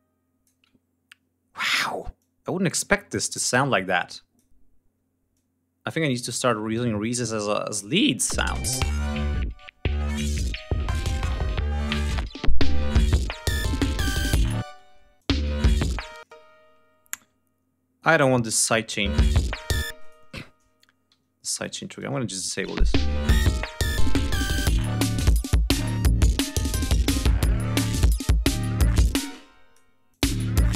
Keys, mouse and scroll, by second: 1.9-4.2 drag, 5.0-6.4 drag, 6.4 click, 7.1 ctrl+scroll up 2, 7.9 click, 8.0 space, 8.6 ctrl+scroll up 2, 9.1 ctrl+scroll down 2, 10.4 ctrl+scroll up 2, 12.1 ctrl+scroll down 2, 14.3 space, 14.9 click, 15.0 space, 15.2-15.8 scroll up 2, 15.9 space, 16.2 ctrl+scroll up 2, 17.8 click, 18.6 click, 18.7 space, 19.6 space, 19.7 click, 20.8 alt+1, 21.2 alt+shift+click, 21.6 alt+shift+right click, 22.2 shift+click, 22.4 space, 22.7 ctrl+scroll down 2, 23.9-24.5 scroll down 2, 25.0-26.2 scroll down 6, 26.7 click, 27.8 ctrl+click, 28.9 ctrl+space, 29.0 ctrl+click, 29.8 ctrl+click, 30.0 ctrl+space, 30.1 ctrl+scroll up 2.